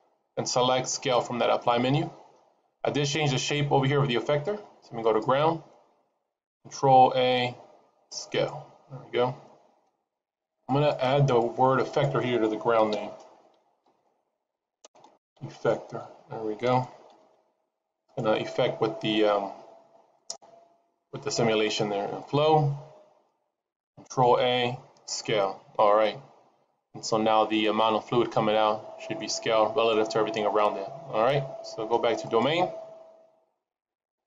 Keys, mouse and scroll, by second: 4.9 click, 6.9 ctrl+a, 10.4 click, 12.9 click, 16.7 BackSpace, 20.0 click, 22.1 click, 24.1 ctrl+a, 28.7-29.9 scroll down 3, 29.1 middle click, 29.9-31.7 scroll up 3, 32.1 click.